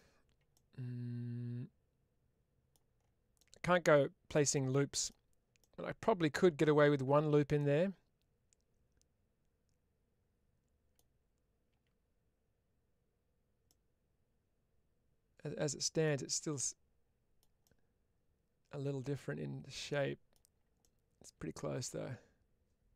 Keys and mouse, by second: 0.5-2.6 middle drag, 3.2 middle click, 4.2 middle click, 4.6 middle click, 5.5 middle click, 7.4-10.8 middle drag, 13.6-15.9 middle drag, 16.5-17.2 middle drag, 17.5-22.9 middle drag.